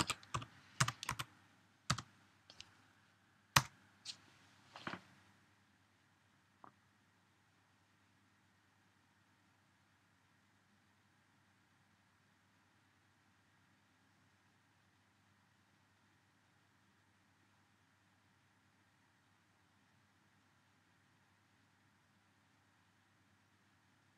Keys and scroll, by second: 0.0-1.7 typing.